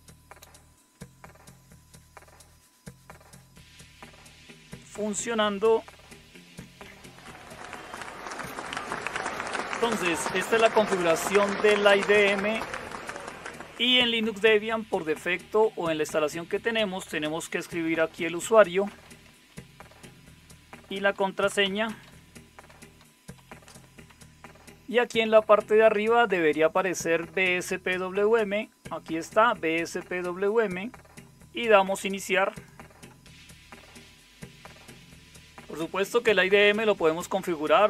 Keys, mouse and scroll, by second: 6.8 alt+super+KP_9, 13.1 click, 17.3-24.0 typing.